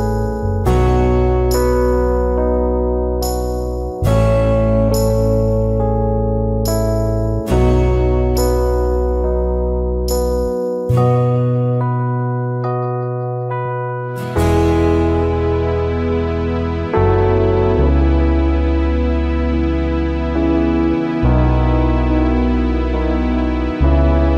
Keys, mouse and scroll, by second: 11.1 alt+scroll down 1, 11.3 space, 12.1 alt+scroll up 1, 14.0 alt+scroll up 1, 16.8 space, 22.9 ctrl+shift+a, 23.2 v, 23.5 alt+scroll down 1, 23.6 space.